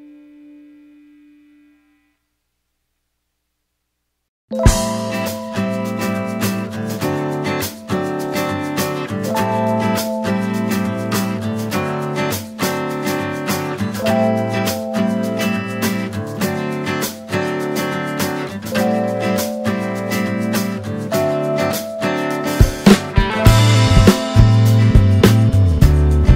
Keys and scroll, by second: 2.6 alt+space.